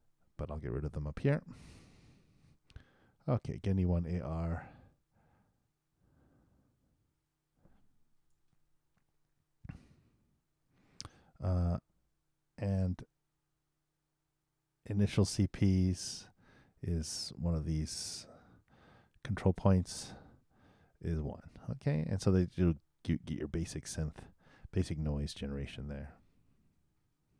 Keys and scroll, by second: 2.3 super+v.